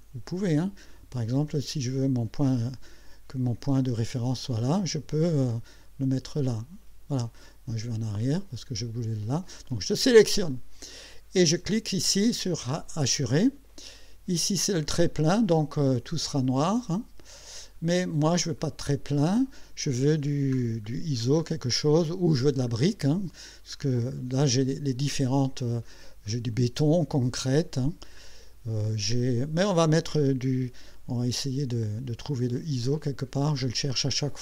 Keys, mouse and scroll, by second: 6.4 click, 8.2 click, 9.6-10.7 drag, 12.8 click, 15.0 click, 16.8 click, 17.9 click, 18.6 click, 19.2 click, 20.3-21.7 scroll down 4, 22.3-22.7 scroll up 2, 22.9 scroll down 2, 23.4-23.8 scroll down 2, 24.1-25.4 scroll up 2, 28.0 scroll down 2, 28.6-29.8 scroll down 6, 30.1 scroll down 2, 34.1 scroll up 2.